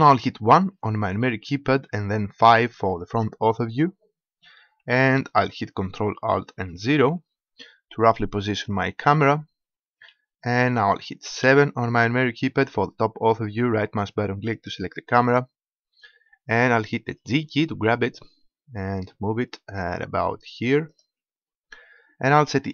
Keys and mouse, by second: 0.8 KP_1, 2.5 KP_5, 6.8 ctrl+alt+KP_0, 11.5 KP_7, 12.9-14.6 middle drag, 14.9 middle click, 15.1-16.4 drag, 17.5 g, 21.1-22.7 drag.